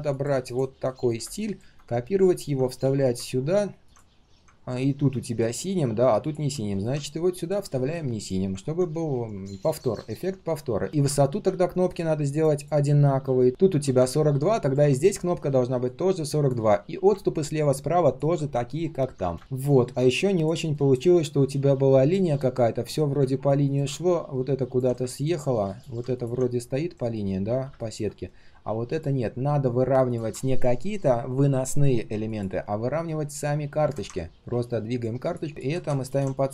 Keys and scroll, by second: 0.9 ctrl+alt+c, 2.6 ctrl+alt+v, 6.7 ctrl+alt+c, 7.8 ctrl+alt+v, 22.7 ctrl+shift+3, 23.0 ctrl+shift+3, 26.7 ctrl+shift+3, 27.0 ctrl+shift+4, 34.3 ctrl+z, 36.3 alt+h.